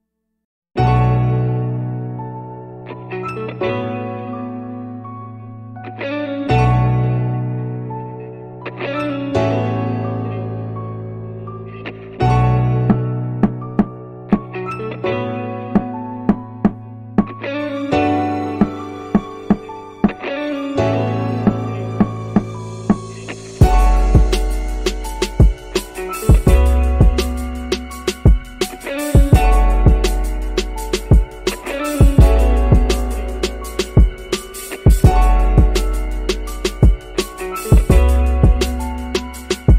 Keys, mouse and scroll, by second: 0.1 space, 1.3 space, 6.3-11.6 drag, 12.3 middle click, 14.9-16.3 middle drag, 19.8-20.8 drag, 22.7 click, 24.2 shift+s, 28.6-31.1 drag, 31.9 middle click, 34.3 click, 38.2 shift+click.